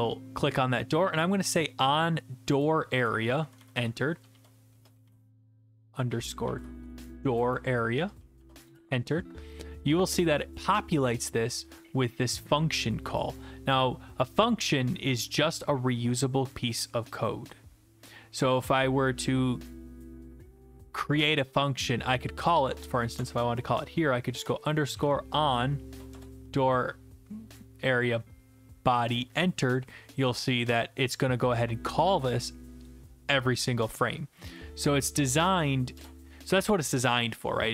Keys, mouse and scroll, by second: 1.5 click, 1.7 click, 2.6 click, 3.4-8.0 typing, 3.7 Left, 8.7 Return, 13.2 click, 22.5 click, 23.2 Return, 24.8-25.5 typing, 26.1 Return, 35.4 click, 35.9 BackSpace.